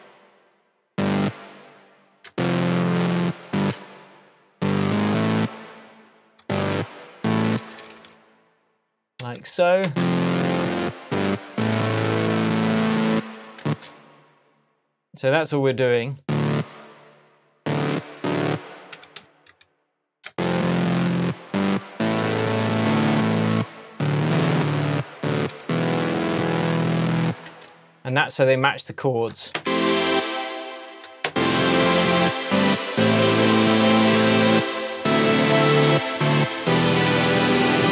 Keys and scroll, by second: 1.9 super+d, 2.2 super+space, 3.1 space, 6.5 alt+BackSpace, 7.4 super+BackSpace, 7.5 super+d, 7.5 super+d, 9.8 super+space, 10.7 space, 13.6 space, 17.8 BackSpace, 18.6 super+BackSpace, 18.9 super+d, 19.2 super+d, 20.3 super+space, 21.2 space, 25.2 alt+super+d, 27.4 super+space, 28.2 space, 29.5 super+space, 30.1 space, 31.2 super+space, 32.1 space.